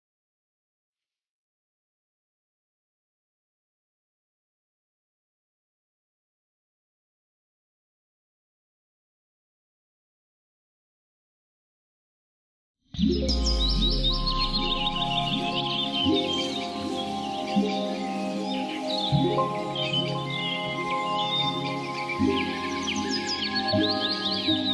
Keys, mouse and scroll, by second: 0.0-2.0 typing, 2.8 Return, 3.4 click, 4.5-6.1 typing, 6.8 click, 8.0 F10, 8.8 click, 9.4-10.6 typing, 11.2 click, 13.7-14.9 typing, 15.0 Return, 15.6 right click, 17.7 click, 19.3 F10, 20.3 click, 22.8-24.7 typing.